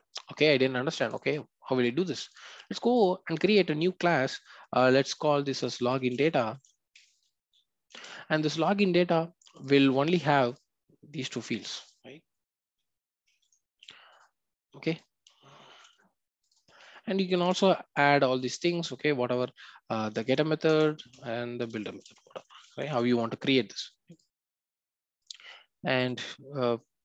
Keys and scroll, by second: 13.3 ctrl+x, 15.7 ctrl+v, 20.7 Return.